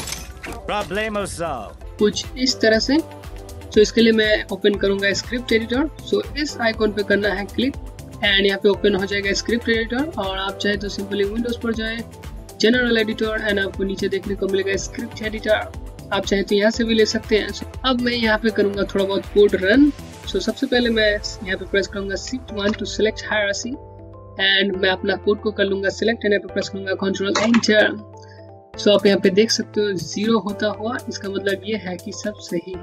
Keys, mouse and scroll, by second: 6.9 click, 10.9 click, 21.9 click, 22.2 shift+1, 24.7 !, 29.6 click.